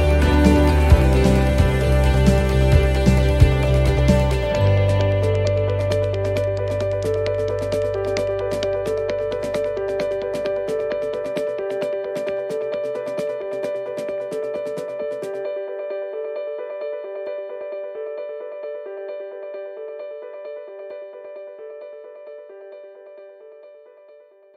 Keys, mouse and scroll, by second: 2.3 BackSpace, 2.5 BackSpace, 7.8 right click, 8.6 click, 15.6 BackSpace, 18.3 right click, 19.3 click.